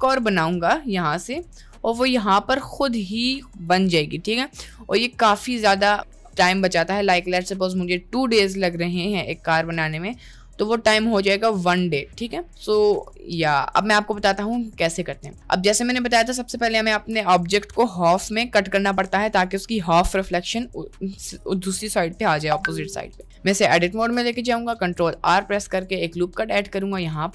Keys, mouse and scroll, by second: 2.1-3.7 drag, 4.8-11.9 ctrl+drag, 13.0 click, 13.8-14.6 middle drag, 15.0-15.4 middle drag, 16.0 middle click, 22.3-22.7 middle drag, 23.0 middle click, 23.4 Tab, 23.4 middle click, 24.8 ctrl+r.